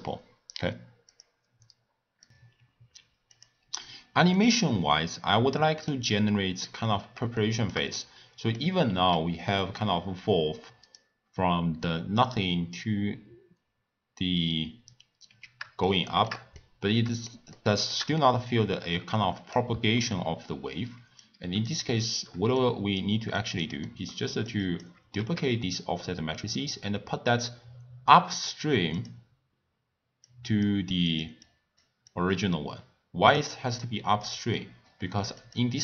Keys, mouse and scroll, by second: 4.3-8.9 middle drag, 8.9 s, 15.8-21.2 shift+middle drag, 21.2 click, 22.5 click, 23.8 middle click, 24.4 click, 25.6 shift+d, 30.2 click, 31.4-32.1 drag, 33.8 click, 34.5-35.4 middle drag, 35.4 click.